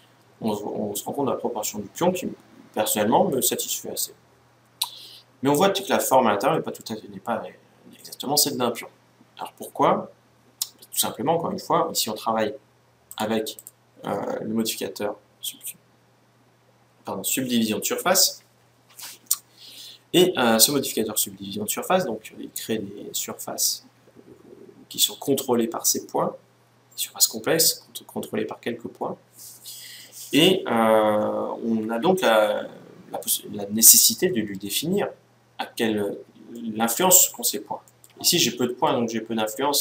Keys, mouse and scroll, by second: 12.8-15.0 drag, 36.3-39.8 middle drag.